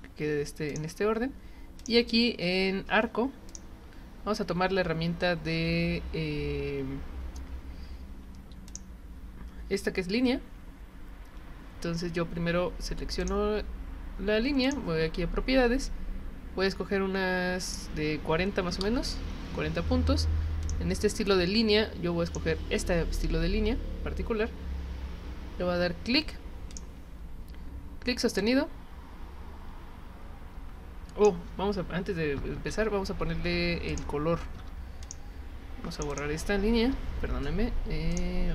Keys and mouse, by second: 0.7 click, 1.8 click, 3.5 click, 8.7 click, 13.2 click, 14.6 click, 17.7 click, 20.6 click, 22.3 click, 26.7 click, 28.4-31.3 drag, 33.9 click, 35.0 click, 35.9 click, 36.1 click, 36.9 Delete, 38.1 click.